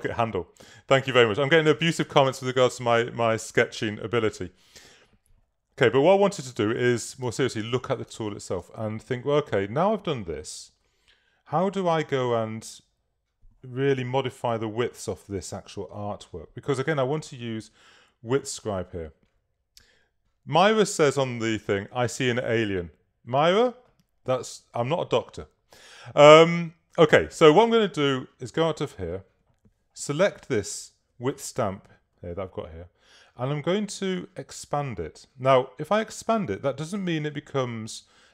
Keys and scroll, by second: 0.1 space, 1.7 space, 6.4 super+-, 7.4 super+space.